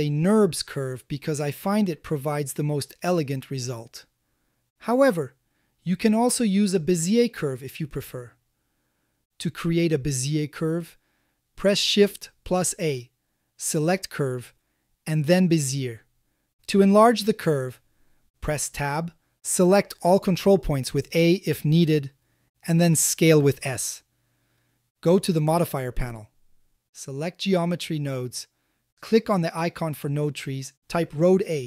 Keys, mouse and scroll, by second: 1.1 click, 1.5 g, 1.8 shift+z, 3.1 click, 3.9 click, 4.2 g, 4.5 shift+z, 5.3 click, 5.6 Tab, 6.1-6.5 drag, 6.5 a, 6.9 x, 9.2-9.6 shift+middle drag, 12.8 shift+a, 19.3 Tab, 20.8 a, 23.2 s, 23.9 click, 24.4 s, 25.4 click, 25.8 Tab, 28.0-28.9 drag, 30.8-31.6 drag.